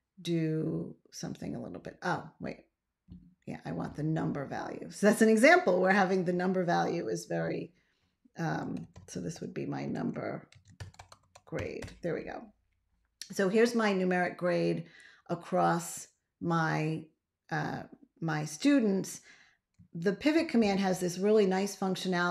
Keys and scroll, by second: 8.4-12.0 typing, 20.2 ctrl+a.